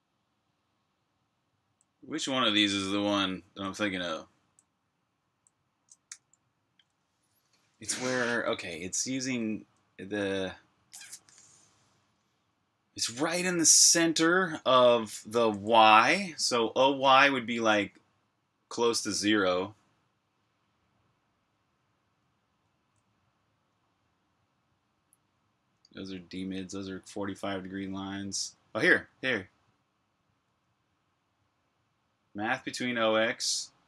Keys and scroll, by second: 1.2-6.4 typing, 9.2-10.0 typing, 11.6-12.2 typing, 17.2 k, 21.6-23.7 typing, 24.9-30.2 typing.